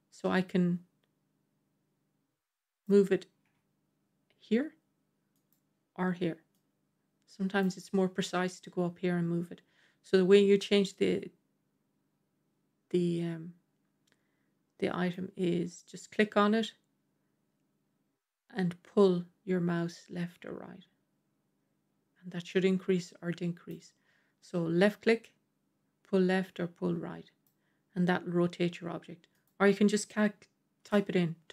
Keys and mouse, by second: 3.3 r, 5.2 r, 6.4-7.5 drag, 15.1-23.6 drag, 24.7-27.3 drag, 29.3-31.5 drag.